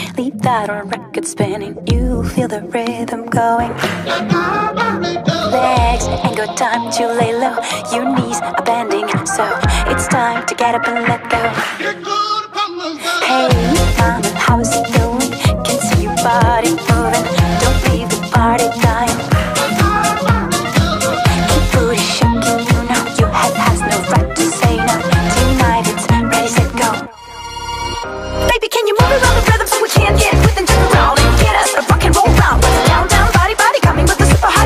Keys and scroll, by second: 18.0 space.